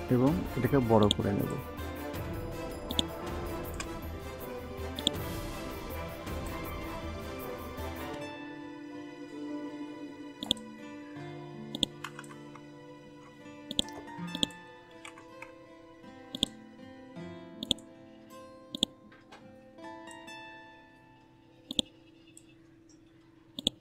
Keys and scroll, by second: 12.9 ctrl+x, 14.8 ctrl+v.